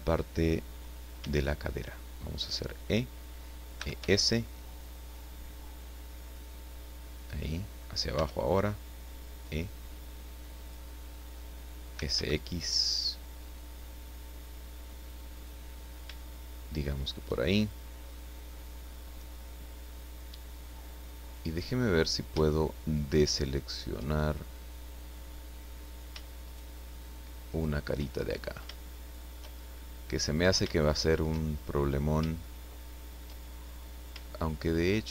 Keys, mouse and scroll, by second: 1.2 e, 2.8 click, 3.8 e, 4.0 s, 7.1 click, 8.1 e, 10.6 click, 11.9 s, 12.1 x, 15.3 click, 16.1-17.3 shift+middle drag, 17.6-18.2 shift+scroll down 1, 18.5-19.2 scroll up 1, 19.2 scroll up 1, 19.8-21.8 middle drag, 22.2 scroll up 2, 22.4 shift+middle click, 26.4 shift+right click, 27.5 shift+right click, 28.1-28.8 shift+scroll up 3, 28.8 shift+middle click, 29.6 shift+scroll down 2, 30.8 shift+middle click, 31.5-32.1 shift+scroll up 5, 32.4 shift+middle click.